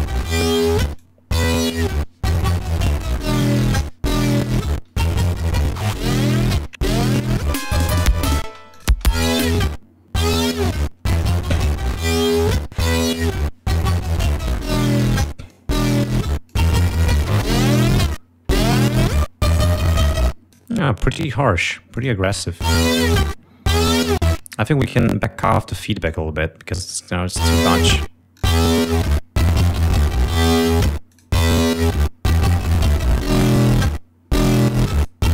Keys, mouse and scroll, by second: 0.0 click, 1.2-2.8 drag, 3.2 click, 5.5 click, 7.7 click, 8.6 space, 8.9 click, 9.6 click, 14.0 click, 15.5 click, 16.5 click, 17.7 click, 19.6 click, 20.8 click, 21.9 space, 22.2 click, 22.6 space, 24.4 space, 25.0 click, 26.1 click, 27.3 l, 28.3-30.4 drag, 30.9 click, 32.5 click, 34.0 click, 34.9 click.